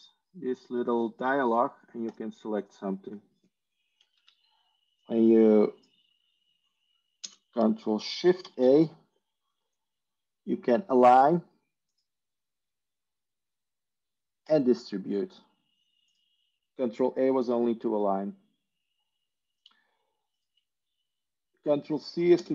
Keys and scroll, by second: 4.0 ctrl+a, 4.1 ctrl+z, 8.3 ctrl+space, 8.3 ctrl+shift+a, 22.3 ctrl+space.